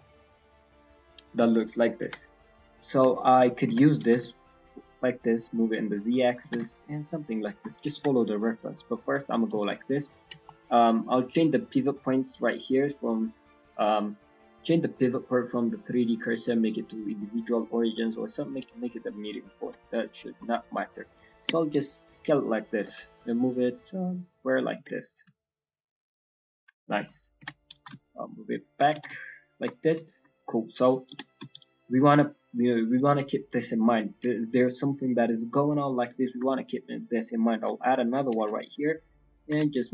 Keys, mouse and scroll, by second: 1.0 scroll down 2, 1.3 middle click, 2.0 KP_1, 3.1 shift+middle click, 3.6 g, 11.1 scroll down 3, 13.8 click, 14.5 click, 16.9 click, 17.8 click, 18.9 scroll up 2, 19.5 scroll, 20.1 shift+middle click, 20.1 scroll, 20.1 scroll up 3, 26.4 scroll, 26.4 s, 26.5 scroll down 1, 26.8 shift+middle click, 27.1 scroll up 1, 27.1 scroll down 1, 27.3 g, 29.7 scroll down 1, 30.0 shift+middle click, 30.3 scroll down 1, 34.0 scroll down 1, 34.0 e, 34.3 shift+middle click, 36.2 shift+middle click, 36.5 scroll down 1, 36.5-37.1 scroll up 2, 37.7 shift+middle click, 38.0 scroll up 1, 38.2 s, 39.4 g.